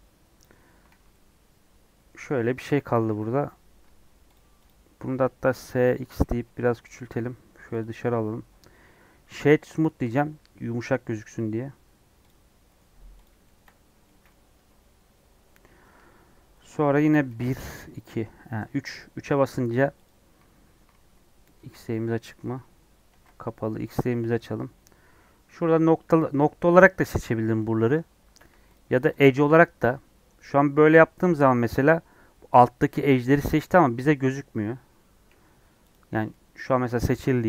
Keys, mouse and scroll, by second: 0.3 click, 0.6 scroll down 1, 0.8 alt+z, 1.0-3.8 middle drag, 3.8 Tab, 4.3 click, 4.6 click, 5.0 s, 5.9 s, 6.8 g, 8.1-12.2 right drag, 12.2 click, 12.4 scroll up 2, 12.6 middle click, 13.2 click, 13.4-14.5 shift+middle drag, 14.5 Tab, 15.9 2, 16.5 middle click, 17.2 KP_1, 17.6 KP_3, 19.1 1, 20.0 click, 22.3 middle click, 23.1 alt+z, 28.3 2, 28.7 click, 31.6 click, 32.4 scroll up 3, 33.3 scroll down 1, 33.5-35.5 middle drag, 35.5 KP_3, 36.2-37.4 middle drag.